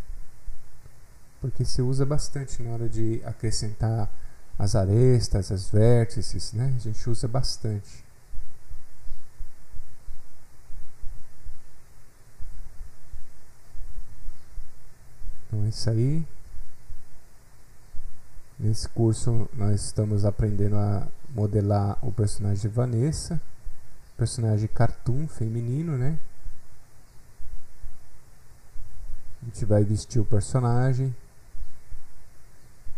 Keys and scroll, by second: 17.8 F8, 18.0 F8, 18.0 alt+Tab.